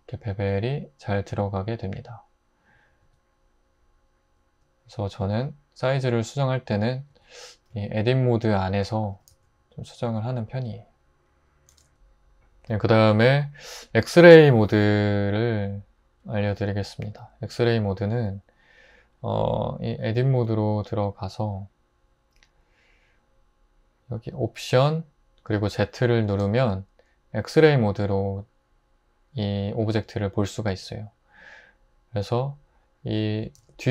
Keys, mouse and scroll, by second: 3.0 Tab, 7.1 Tab, 7.7 a, 9.1 typing, 11.7 super+z, 20.1 Tab, 26.3 alt+z, 33.6 alt+z.